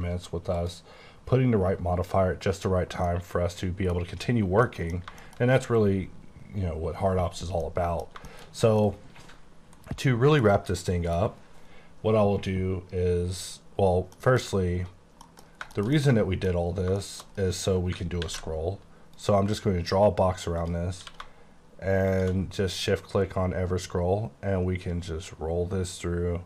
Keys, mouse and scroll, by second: 0.0-0.5 scroll down 5, 0.5 click, 1.3-3.1 scroll down 7, 3.1 middle click, 4.7 middle click, 5.2 shift+middle click, 7.6 middle click, 8.1 scroll down 2, 8.3 shift+middle click, 9.2 middle click, 10.9 middle click, 13.7 scroll up 2, 14.2 middle click, 15.2 middle click, 15.5 scroll down 2, 15.8 shift+middle click, 16.7 shift+middle click, 18.3 F2, 20.3 click, 20.7 click, 21.1 q, 22.2 shift+click, 23.3-24.5 scroll up 5, 25.0-26.2 scroll up 5, 26.3-26.4 scroll up 6.